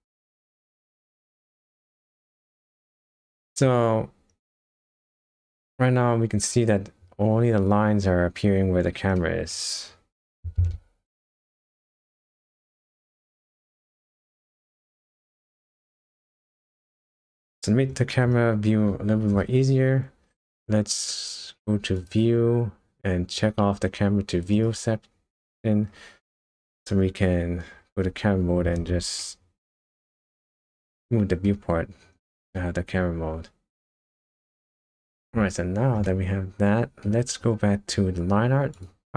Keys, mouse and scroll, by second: 2.8 middle click, 3.7-4.9 scroll up 6, 5.1 shift+middle click, 7.4 scroll down 2, 9.2 middle click, 9.7-10.4 scroll up 1, 10.4 g, 13.3 middle click, 15.1-15.5 scroll down 3, 15.5 middle click, 16.1 scroll up 1, 17.0-17.7 scroll up 5, 17.7-18.5 scroll down 3, 22.0 click, 24.5 click, 27.8 KP_0, 29.2 shift+middle click, 30.9 middle click, 31.7-32.2 scroll up 4, 32.5 shift+middle click, 35.1 KP_0, 36.0 middle click, 37.2-38.2 scroll up 1, 38.7 click.